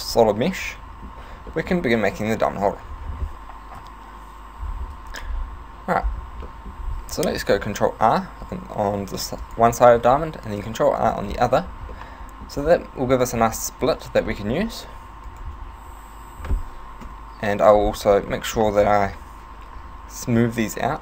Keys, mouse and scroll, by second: 1.5 middle click, 2.8 Tab, 3.8 KP_7, 5.0 a, 5.3-6.0 scroll down 1, 6.0 scroll down 4, 6.5 middle click, 6.8-7.2 scroll up 3, 7.9 ctrl+r, 9.2 ctrl+r, 9.8 right click, 10.5 ctrl+r, 11.5 right click, 12.0 middle click, 13.8 alt+right click, 14.4 middle click, 15.3 alt+shift+right click, 16.3 ., 17.0 KP_7, 18.4 shift+middle click, 20.9 s.